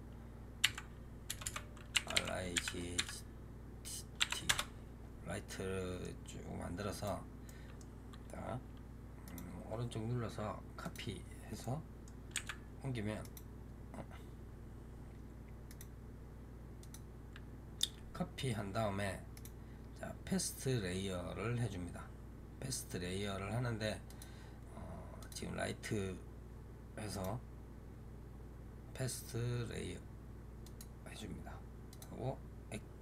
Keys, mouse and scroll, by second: 1.3 BackSpace, 5.4-6.8 middle drag, 6.8 click, 7.3-9.1 middle drag, 9.1-11.5 right drag, 11.5 middle click, 12.2 g, 15.5-23.9 right drag, 23.9 click, 25.1 click, 27.0-31.8 right drag, 31.8-33.0 drag.